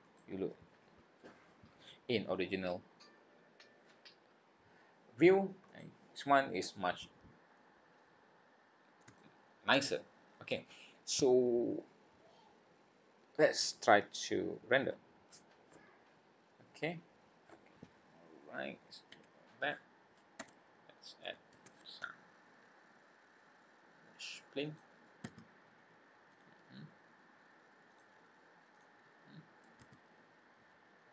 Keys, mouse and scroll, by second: 0.0 click, 5.7 click, 7.4 scroll down 3, 8.2-8.6 scroll up 3, 9.1 shift+middle click, 9.8 scroll up 2, 10.2 scroll down 2, 19.8 scroll down 2, 20.4 Tab, 20.7-21.1 scroll down 4, 21.5 shift+a, 25.2 s, 27.9 click, 28.7 click, 29.8 s.